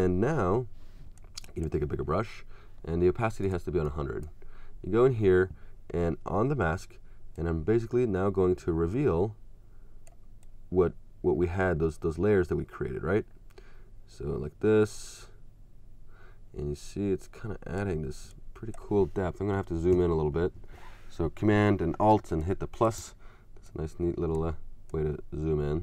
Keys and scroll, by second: 22.1 space.